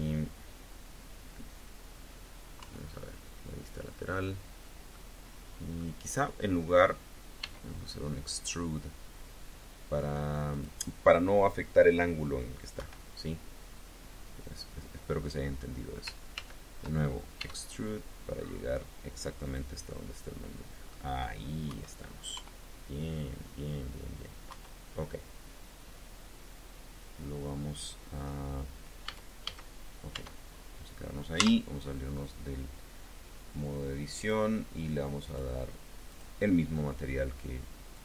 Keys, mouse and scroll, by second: 2.4 KP_3, 4.8-5.8 drag, 7.2 e, 10.4 click, 12.6 KP_1, 16.2 ctrl+z, 17.2 e, 19.3 click, 19.7-20.9 drag, 21.5 KP_1, 22.3 KP_3, 24.3 KP_1, 28.8 a, 30.0 Tab, 31.2 z, 34.0 click, 35.1 click, 35.9 click, 37.8 click.